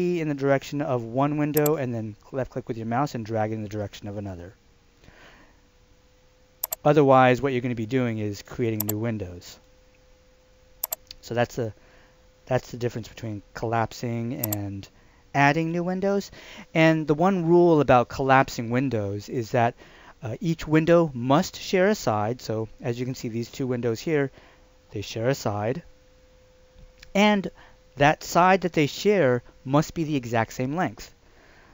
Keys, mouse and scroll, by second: 1.5 click, 6.6 click, 14.4 click.